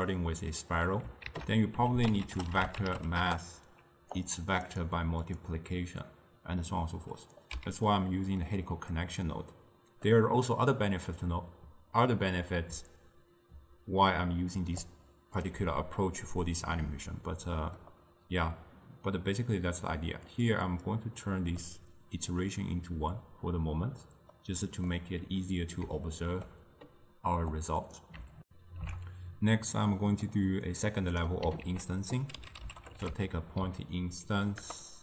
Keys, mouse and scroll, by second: 3.3 ctrl+a, 5.4-7.6 drag, 7.6 x, 16.3-20.5 middle drag, 20.5-21.7 drag, 21.7-28.5 middle drag, 28.5 ctrl+alt+shift+q, 29.8-30.8 middle drag, 30.8-31.8 drag, 31.8 ctrl+a.